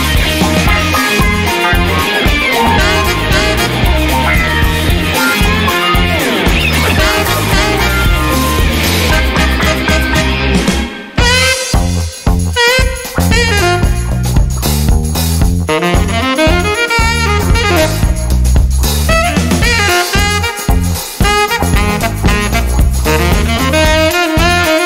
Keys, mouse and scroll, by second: 0.0 click, 1.7 click, 4.2 click, 5.2 click, 6.7 click, 8.4 click, 10.0 click, 10.9 click, 13.0 click, 14.3 click, 15.5 click, 16.4 click, 18.3 click, 19.4 click, 20.8 click, 22.6 click.